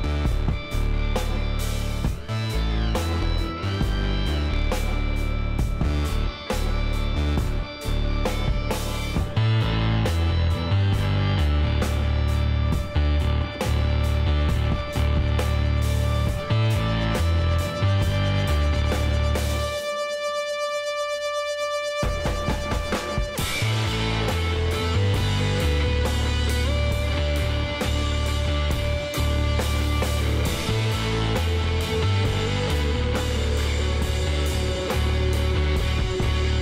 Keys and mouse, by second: 5.1 middle click, 5.6 middle click, 5.7 KP_1, 6.8 z, 10.3 middle click, 11.2 click, 11.5 z, 11.8 click, 12.2 middle click, 13.0 Tab, 15.4-19.1 drag, 17.7 KP_1, 19.1 shift+d, 20.6 p, 21.5 Tab, 23.0 s, 27.9-29.4 middle drag, 28.5 shift+x, 29.6 Tab, 30.7 ctrl+r, 34.8 ctrl+r.